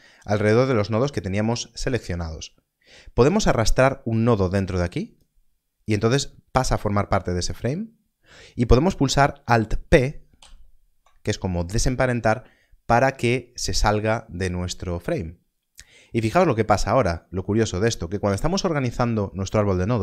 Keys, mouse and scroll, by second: 3.8 click, 10.3 alt+p, 16.2 alt+p.